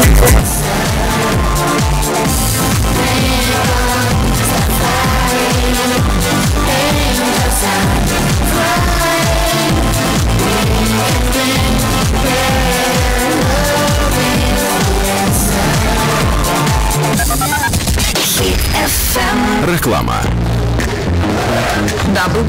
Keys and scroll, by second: 0.2 Page_Down.